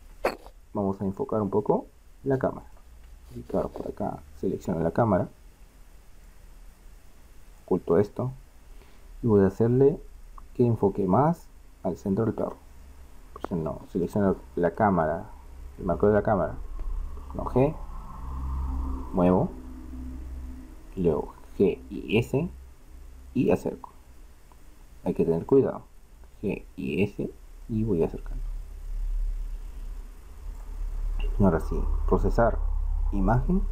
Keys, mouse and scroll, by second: 0.0 Escape, 4.4-6.2 middle drag, 6.2-8.5 drag, 14.0-16.5 drag, 17.8 g, 21.6 g, 26.4 g, 32.2-33.6 drag.